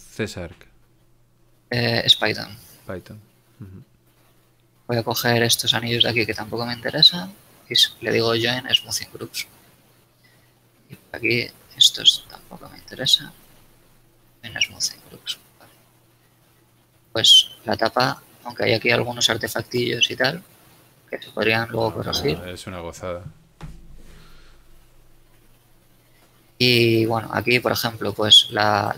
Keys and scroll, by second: 0.1 ctrl+alt+a, 9.1 a, 15.2 a, 16.1 shift+Tab, 20.5 Tab, 21.3 Tab, 24.2 alt+Tab, 27.1 shift+Tab.